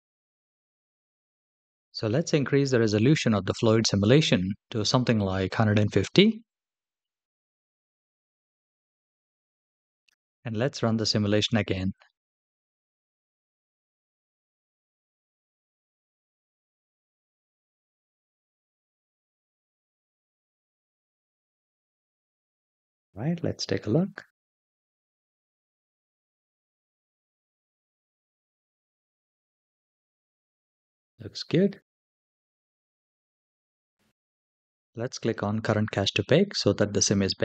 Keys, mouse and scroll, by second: 0.0 space, 1.4 click, 3.9 click, 5.1-8.3 drag, 11.6 click, 13.2 click, 22.8-23.9 scroll down 1, 23.9 middle click, 33.3 click, 35.8 click.